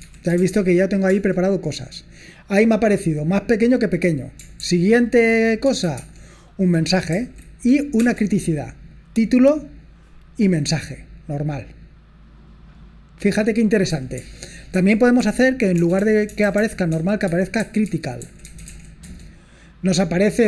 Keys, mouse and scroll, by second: 0.0-1.1 typing, 2.2-2.5 typing, 5.7 space, 6.0 shift+', 7.1 Right, 8.0 Return, 8.9-9.4 typing, 11.5 click, 12.0 click, 13.1 click, 15.2 ctrl+p, 15.8-19.2 typing.